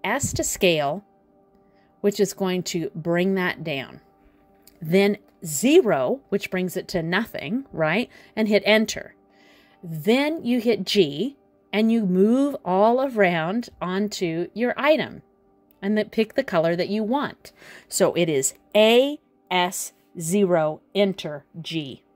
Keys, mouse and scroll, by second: 3.4 a, 5.3 s, 11.4 g, 19.4-19.7 scroll down 3, 19.6 middle click.